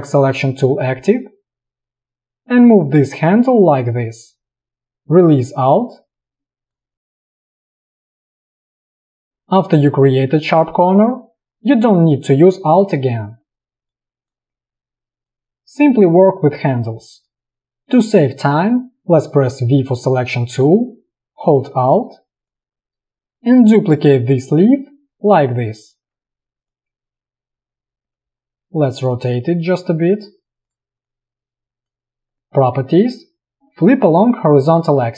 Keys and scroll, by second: 19.6 v.